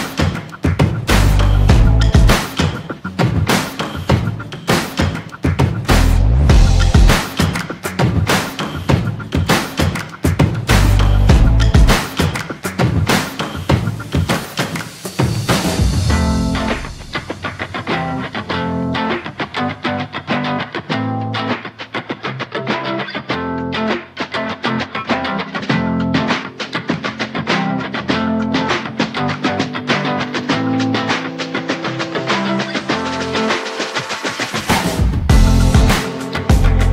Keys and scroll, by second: 31.8 ctrl+z.